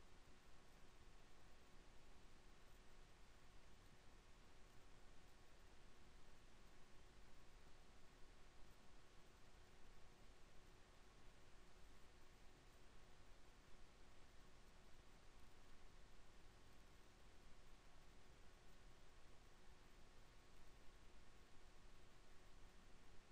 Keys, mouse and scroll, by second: 10.8 Tab, 17.0 Tab, 18.0 ctrl+r, 22.5 ctrl+r.